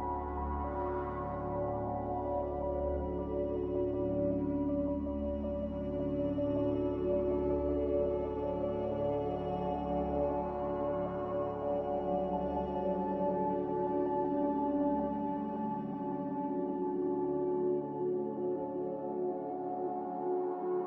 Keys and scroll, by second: 8.0 q.